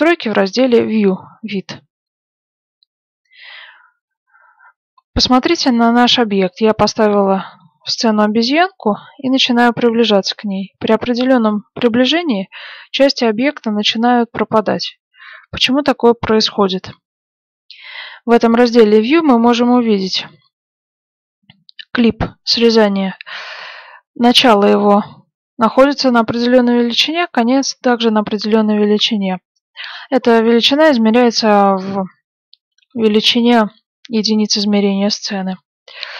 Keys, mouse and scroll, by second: 5.0-6.0 scroll up 1, 6.0-8.0 middle drag, 8.7 middle click, 9.2-10.6 scroll up 1, 10.6-11.3 scroll up 1, 11.3-12.0 scroll up 1, 12.0 scroll down 1, 12.2-13.9 middle drag, 14.5-14.9 scroll up 1, 14.9-16.5 middle drag, 16.5-21.3 scroll down 1, 35.9 click.